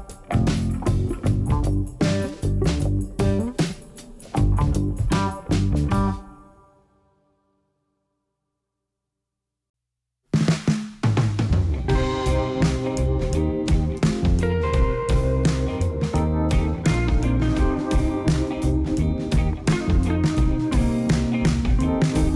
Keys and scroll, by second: 10.8 1, 12.6 g, 13.5 z, 17.4 shift+z.